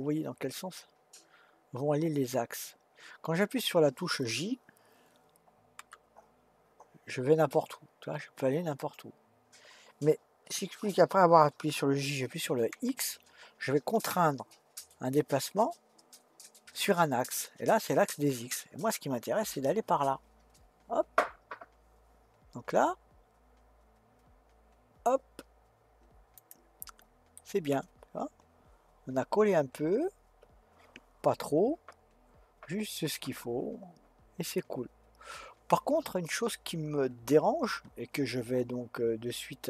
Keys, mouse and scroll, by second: 5.8 g, 27.4-30.5 middle drag.